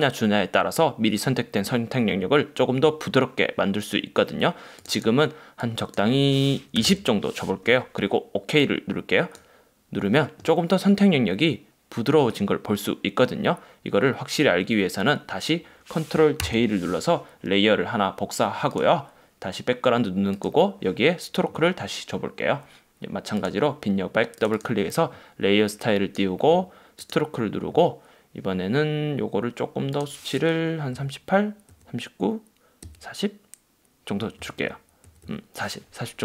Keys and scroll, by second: 16.6 super+j.